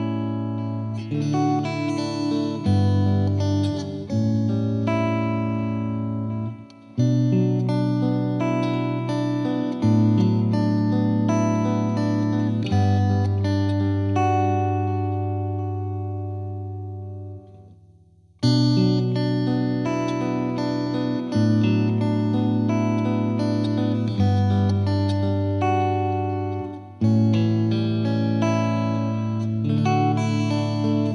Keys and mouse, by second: 0.6 click, 2.3 click, 3.0 click, 4.6 click, 6.0 click, 6.8 click, 7.4 click, 9.4 click, 13.2 click, 14.1 click, 15.1 click, 23.7 right click, 23.8 click, 27.3 click, 29.0 ctrl+z, 29.8 click, 30.8 click.